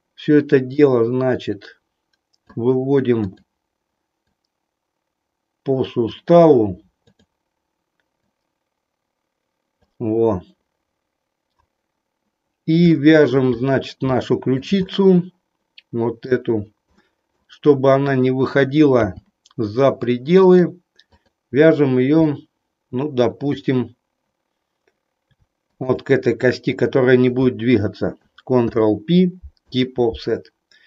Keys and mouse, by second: 0.7-2.4 drag, 3.2 click, 4.2-6.1 drag, 7.1 click, 8.2-9.7 drag, 12.8 shift+middle click, 14.2 shift+middle click, 14.8-16.4 middle drag, 17.1 middle click, 17.9 click, 19.1 g, 21.1 click, 22.3-23.7 middle drag, 25.7 shift+click, 28.6 ctrl+p.